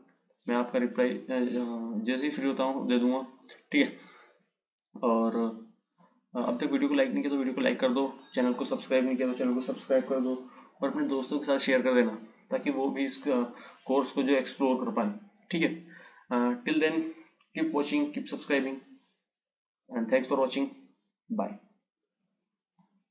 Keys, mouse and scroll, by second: 6.4-9.5 drag.